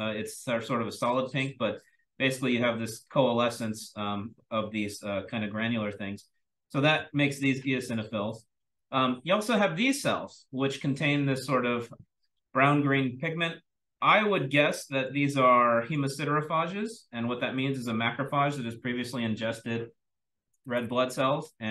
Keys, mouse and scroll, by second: 1.0-4.8 scroll up 1, 4.8-5.9 scroll up 1, 5.9-7.3 scroll up 1, 7.3-8.2 scroll up 1, 8.2-8.7 drag, 8.2-9.6 scroll down 1, 9.6-11.4 scroll down 1, 11.4-13.2 scroll down 1, 13.2-13.7 scroll down 1, 13.7 click, 13.7-15.6 scroll up 1, 14.6-15.0 drag, 15.6-16.2 drag, 15.6-21.6 scroll up 1, 16.5-17.4 drag, 21.6-21.7 scroll up 1.